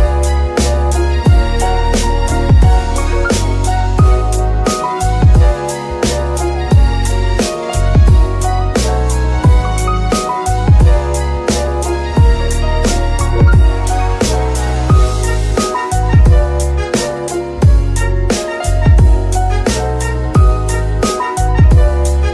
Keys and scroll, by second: 10.6 alt+shift+r, 11.1 r, 11.9 Escape, 12.4 r, 12.5 r, 17.0 Escape, 19.7 shift+r.